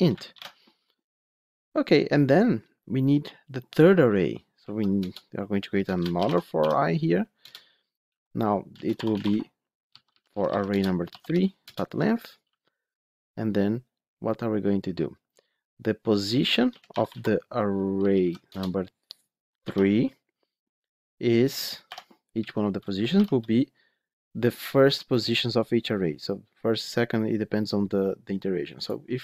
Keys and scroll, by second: 0.2 ctrl+alt+l, 7.4 Return, 18.3 Return, 22.2 Return.